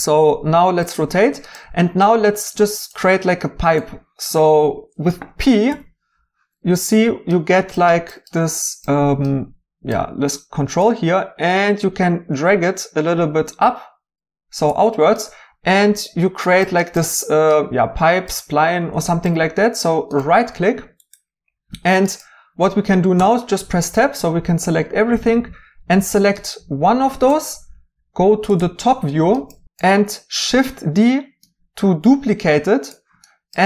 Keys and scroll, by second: 5.6 p, 23.2 Tab, 30.5 d.